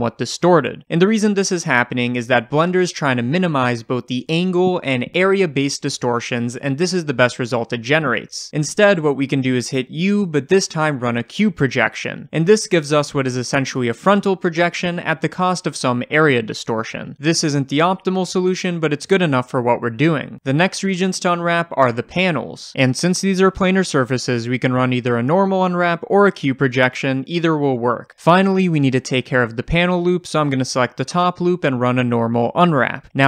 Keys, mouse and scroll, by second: 8.8 ctrl+z, 17.2 click, 18.3-21.4 shift+middle drag, 19.2-20.2 scroll down 1, 21.4 click, 23.5 u, 28.0 click, 28.5 scroll up 1, 28.8-29.8 shift+middle drag, 29.2-29.5 scroll up 1, 29.8 click, 30.0-33.2 middle drag, 30.9 l.